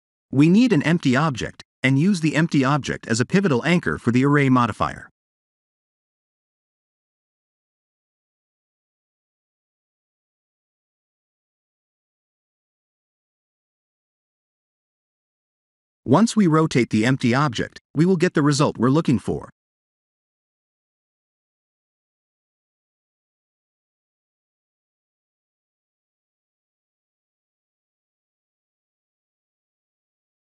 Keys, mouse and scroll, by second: 0.4 shift+a, 3.0 middle click, 3.9 click, 4.9 click, 5.5 click, 8.8 click, 9.7 click, 10.4 click, 11.3 click, 11.8 click, 12.4 click, 16.2 click, 17.6 click, 19.5 ctrl+z, 19.9 click, 20.7 ctrl+z, 21.4 click, 25.0 middle click, 28.2 click.